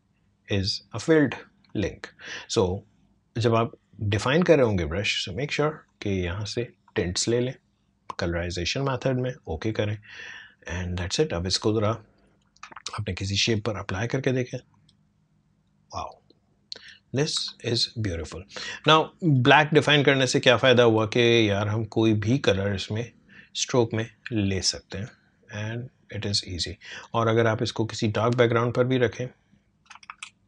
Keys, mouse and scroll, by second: 5.8-13.4 drag, 17.5 alt+scroll up 1, 18.2-18.7 scroll down 3, 18.9 space, 19.0 click, 19.4 space, 20.9 click, 27.6 alt+scroll down 1, 28.6-30.1 alt+drag, 30.1 ctrl+alt+z.